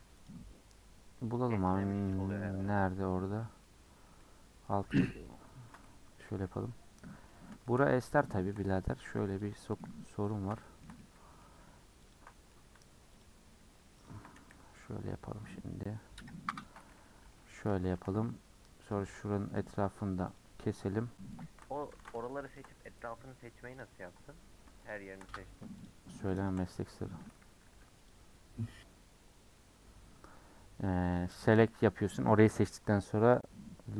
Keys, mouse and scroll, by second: 2.1 KP_Decimal, 3.0-3.4 scroll down 6, 3.4 middle click, 3.9-4.2 scroll up 2, 4.2 middle click, 4.8-5.2 scroll down 5, 5.2-6.3 middle drag, 6.3 /, 6.6-8.2 scroll up 8, 7.1 middle click, 7.6 shift+middle click, 8.3 shift+middle click, 8.6-9.4 scroll up 1, 9.4 click, 9.5 middle click, 10.3 ctrl+click, 10.6-12.1 shift+middle drag, 12.1 ctrl+click, 12.3 middle click, 13.2 ctrl+click, 14.1 ctrl+click, 14.5 c, 17.2 ;, 18.9 alt+click, 19.6 alt+shift+click, 20.4 alt+shift+click, 21.4 alt+shift+click, 22.0 ctrl+z, 22.6 alt+shift+click, 23.8 click, 24.9 shift+click, 25.8 shift+click, 26.5 shift+click, 27.1 a, 29.1 u.